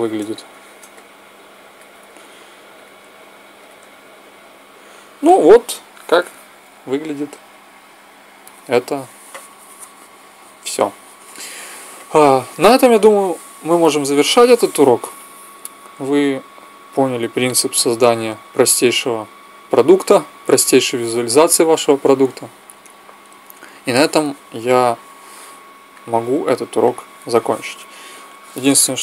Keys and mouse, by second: 2.5-4.2 drag, 25.7-29.0 drag.